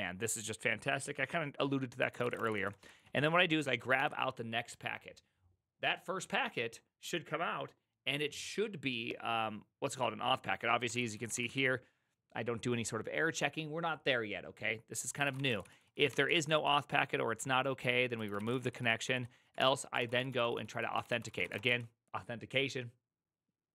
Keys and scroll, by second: 0.0-0.1 typing, 2.0-3.9 typing, 10.7-11.9 typing, 15.1-22.2 typing.